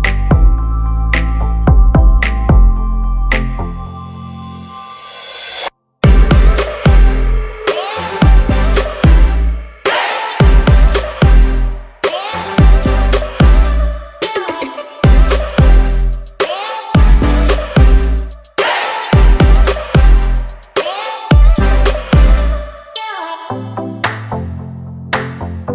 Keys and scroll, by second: 3.2 space, 4.2 p, 6.8 space, 8.9 Escape, 10.8 r, 13.1 p, 17.5 space, 18.5 m, 19.1 Up, 19.7 space, 21.0 p, 21.7 m, 22.1 Up, 23.1 5, 23.3 Return, 23.6 space.